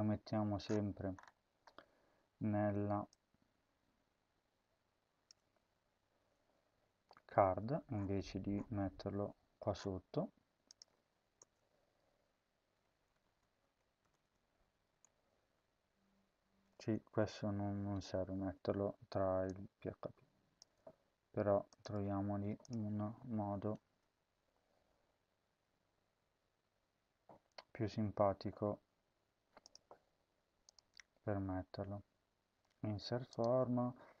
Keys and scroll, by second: 5.9 ctrl+x, 11.3 Return, 13.1-14.1 typing, 15.1 shift+\, 16.5 BackSpace, 16.7 BackSpace, 17.5 ctrl+v, 20.5 BackSpace, 21.7 BackSpace, 23.3 ctrl+s.